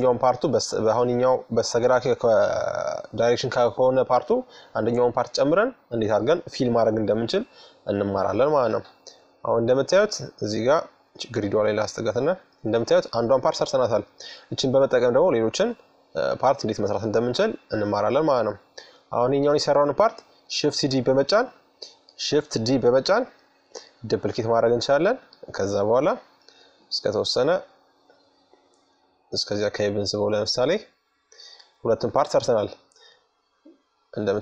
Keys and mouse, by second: 2.0-3.7 drag, 5.7-7.4 middle drag, 9.3-11.0 drag, 11.2-13.0 middle drag, 17.9-21.5 middle drag, 21.2 shift+d, 24.0-25.8 drag, 29.2-31.1 middle drag.